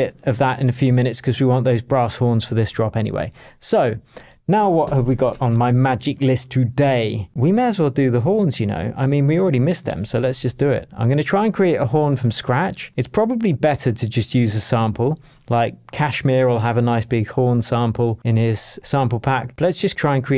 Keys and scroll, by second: 11.9 shift+super+t.